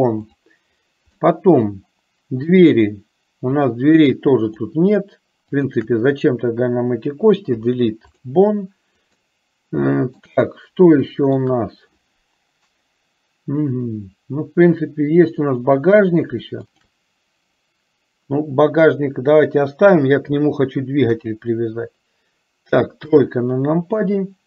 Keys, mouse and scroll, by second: 1.4 middle click, 2.5 click, 3.7 shift+click, 4.8 shift+click, 5.8 shift+click, 7.7 Delete, 9.3-10.4 middle drag, 10.8 shift+middle click, 15.3 click, 16.8 shift+click, 21.2 KP_4, 23.2 KP_3.